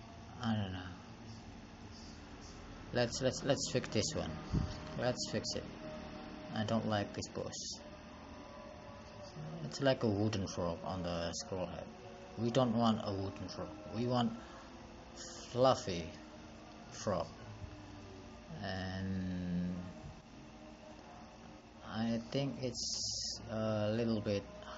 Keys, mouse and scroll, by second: 2.8 click.